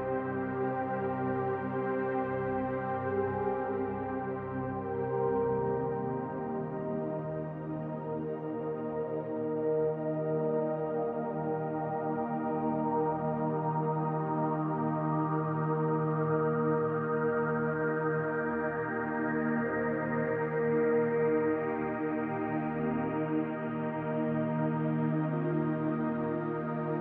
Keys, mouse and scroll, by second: 1.3 click, 1.7-4.3 middle drag, 4.3 click, 4.8 scroll down 1, 4.9-8.5 middle drag, 5.8 scroll up 1, 8.5 click, 8.9-10.7 middle drag, 9.3-10.0 scroll up 1, 10.7 click, 11.2-12.6 middle drag, 12.6 click, 12.9-13.3 scroll down 1, 13.4-17.7 shift+middle drag, 14.0 scroll up 1, 14.9 scroll up 2, 17.7 click, 18.0-22.4 middle drag, 19.5 scroll up 2, 22.4 click, 22.7-23.8 middle drag, 23.8 click, 24.1-25.9 middle drag, 25.9 click, 26.2-27.0 middle drag.